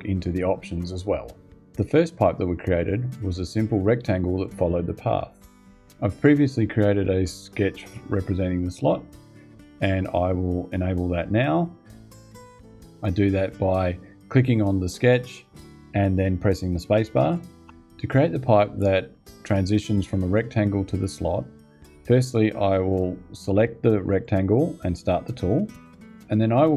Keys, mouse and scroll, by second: 17.4 space, 23.9 click, 25.6 click.